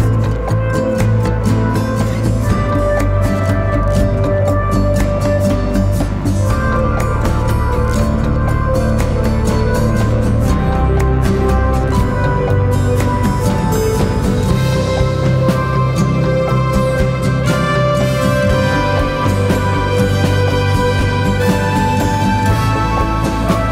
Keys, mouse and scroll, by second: 8.5-11.4 scroll down 1, 21.3 ctrl+t.